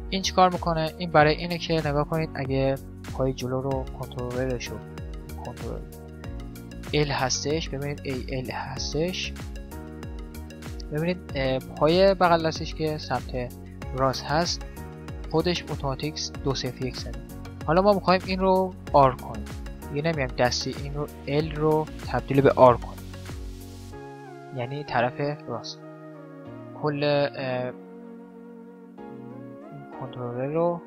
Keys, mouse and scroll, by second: 0.3-4.5 middle drag, 4.5-6.3 right drag, 5.5 middle click, 8.7-11.5 middle drag, 12.0-13.7 right drag, 19.7 middle click, 20.6-22.4 drag, 23.2-26.0 middle drag, 25.9 right click, 26.2-28.3 right drag, 28.8 ctrl+z, 29.1 middle click, 29.7-30.8 drag, 29.7 right click.